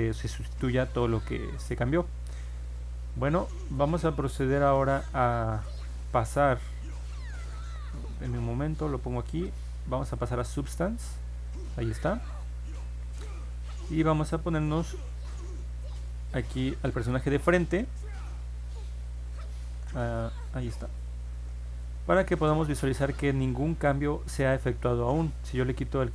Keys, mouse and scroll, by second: 7.5 click, 9.4 click, 10.1 click, 14.6 click, 16.6 middle click, 16.9-17.2 scroll down 2, 17.9-19.7 alt+drag, 20.2-21.3 alt+middle drag, 21.6 middle click, 21.7 scroll up 1, 22.2 scroll down 1, 23.1 scroll up 1, 23.7 middle click, 25.8 click.